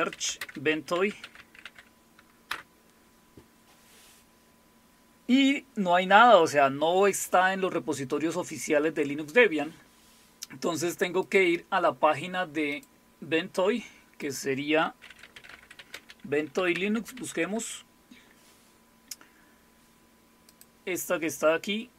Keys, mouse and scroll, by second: 0.0-2.1 typing, 2.5 Return, 4.2 typing, 11.2 click, 12.7 click, 14.2 click, 14.8-17.6 typing, 20.5 click.